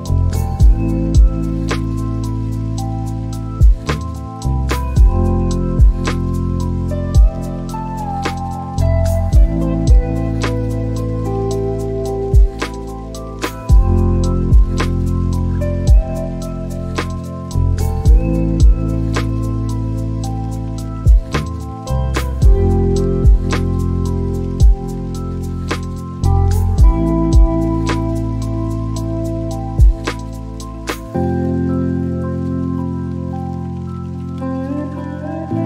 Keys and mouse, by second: 8.1 n, 9.7 space, 11.2 click, 11.9 click, 12.9 n, 16.9 click, 18.8 g.